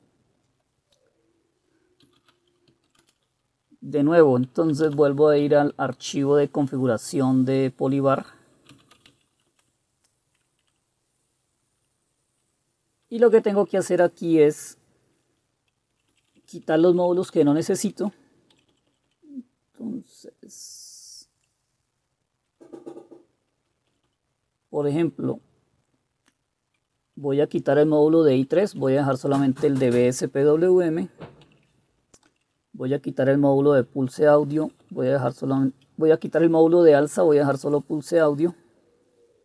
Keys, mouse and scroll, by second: 0.9-2.1 scroll down 1, 2.0-3.5 typing, 2.1 scroll down 1, 4.6-5.6 typing, 8.7-9.6 typing, 9.6 Return, 10.8-12.5 Down, 13.2 Down, 13.3 Down, 13.5 Down, 13.7 Down, 13.9-15.2 Down, 16.0 Down, 16.2 Down, 16.4 Down, 16.6 Down, 16.7 Down, 16.9 Down, 17.1 Down, 17.3 Down, 17.6 Down, 17.8 Down, 18.7 Up, 18.8 Up, 19.0 Up, 19.2 Up, 21.4 Down, 22.1-22.6 Down, 24.0 Up, 24.1 Up, 24.8 Up, 25.4-26.8 Right, 27.1 Right, 27.1 Right, 27.3 Right, 28.4 Delete, 28.6 Delete, 28.9 Delete, 31.6 Down, 32.4 Down, 32.7 Right, 33.3 Right, 33.3 Right, 33.5 Right, 34.5 Left, 34.7 Left, 34.9 Left, 35.1 Left, 35.3 Left, 37.0 Delete, 37.1 Delete, 37.3 Delete, 37.5 Delete, 37.8-38.5 Delete, 38.5 Right, 39.2-39.4 Right.